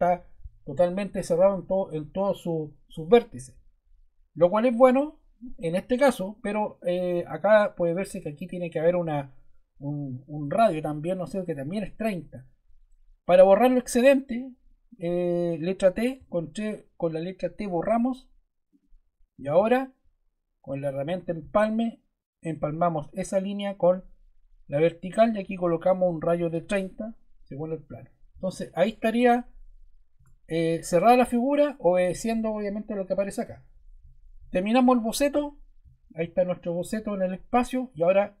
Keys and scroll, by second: 16.1 t, 26.0-27.0 typing, 30.1 Return.